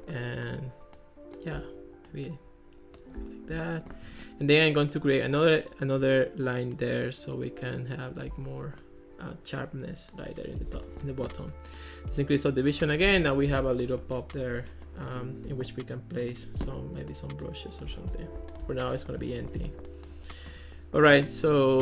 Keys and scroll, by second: 13.1 Escape.